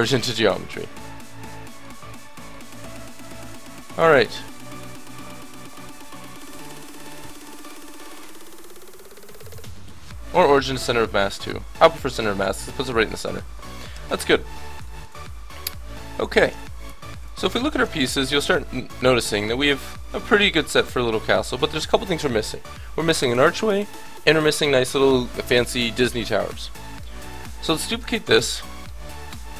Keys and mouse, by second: 2.7-5.4 middle drag, 6.5 ctrl+alt+shift+c, 9.0 middle click, 13.9 KP_7, 16.5-21.2 drag, 17.2-21.2 right drag, 27.2 click, 27.9 shift+d, 29.0 middle click.